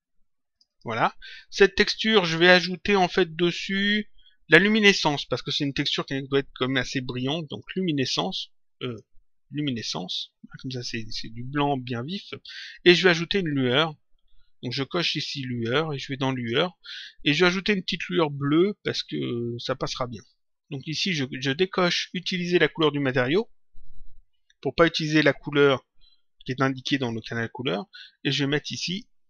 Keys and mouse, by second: 2.5 click, 7.4 click, 8.9 click, 15.4 click, 23.7 click, 28.8 click.